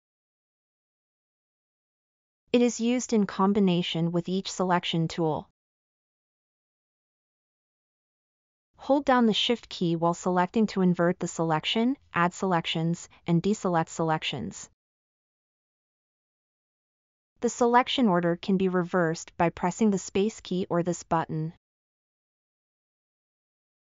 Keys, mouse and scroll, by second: 18.7 space.